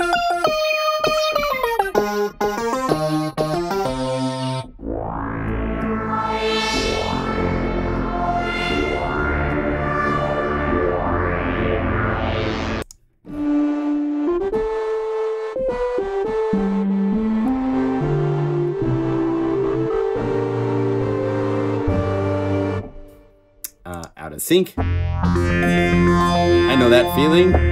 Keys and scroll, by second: 3.4 F2, 6.7 F1, 7.5 F2, 7.5 F4, 18.0 F3, 25.7 F3, 25.9 F2, 26.0 F3, 26.2 F4, 26.3 F2.